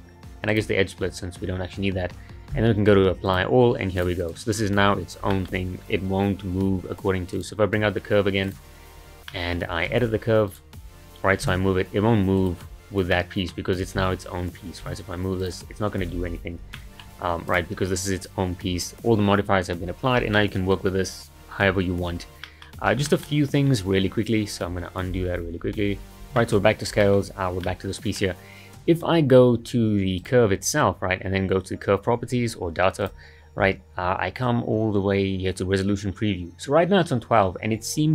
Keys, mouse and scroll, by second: 4.2 click, 4.6-4.9 scroll down 3, 4.9-5.3 scroll up 1, 5.3-5.7 shift+middle drag, 5.7-7.3 scroll down 2, 7.3 click, 8.4 click, 9.3 middle click, 9.9 Tab, 10.5 click, 11.4 g, 13.1-14.0 middle drag, 14.0 Tab, 14.9 g, 16.2 ctrl+z, 16.7-17.1 middle drag, 17.1-17.5 scroll up 2, 17.5 click, 20.3-21.9 middle drag, 21.9-22.4 scroll up 2, 22.4-22.9 middle drag, 22.9 scroll down 2, 23.1-25.1 shift+middle drag, 25.1-25.5 ctrl+z, 25.6 ctrl+z, 25.9 ctrl+z, 26.4 shift+middle drag, 26.7-27.0 scroll up 2, 27.0-30.2 shift+middle drag, 30.2 click, 33.0 click, 34.9-37.8 scroll up 1, 37.8-38.1 scroll up 2.